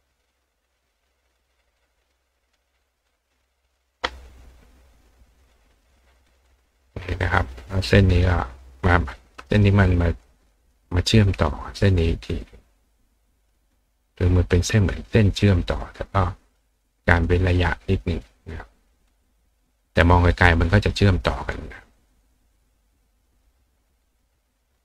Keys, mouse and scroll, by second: 0.6 click, 1.6 click, 3.0 click, 5.3 click, 5.5 click, 5.7 click, 5.9 click, 6.1 click, 6.3 click, 7.2 click, 9.3 click, 9.5 click, 10.2 click, 10.6 click, 12.4-13.5 drag, 15.7 click, 16.8 click, 17.2 click, 18.5-19.6 drag, 20.0 click, 21.9 click, 22.2 click, 22.6 click.